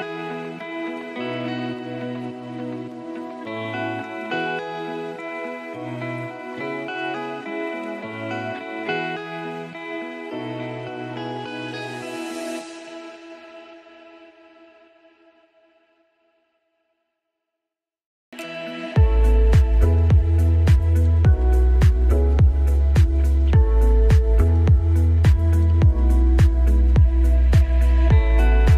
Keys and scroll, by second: 5.1 ctrl+space, 14.0 ctrl+z, 16.4 ctrl+space, 20.6 ctrl+shift+], 25.3 ctrl+space.